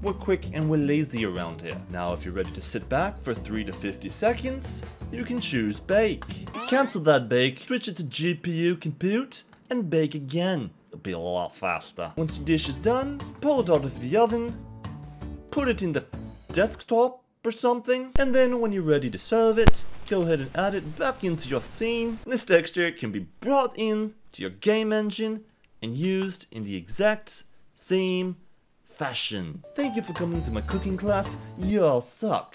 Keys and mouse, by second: 7.6 click, 9.5 click, 14.5-16.0 drag, 18.1 shift+a, 20.0 shift+a, 22.4-23.6 drag.